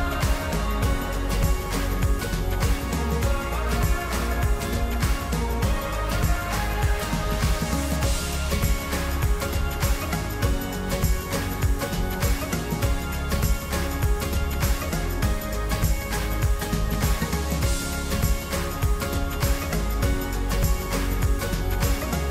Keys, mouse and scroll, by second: 4.4 3, 5.8 2, 6.3-13.4 middle drag, 13.7 3, 14.7 click, 15.3-19.7 middle drag, 19.9 alt+shift+click, 20.8-22.2 middle drag, 22.2-22.3 scroll down 1.